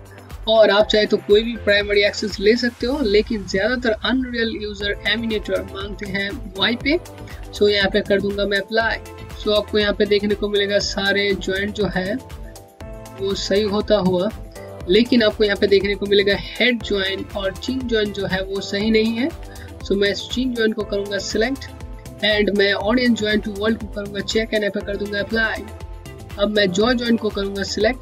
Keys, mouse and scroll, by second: 8.1 click, 9.2 alt+middle click, 10.4 alt+click, 11.6 scroll up 1, 13.0-13.8 typing, 13.5 scroll down 1, 21.2-22.0 scroll down 1, 23.7 click.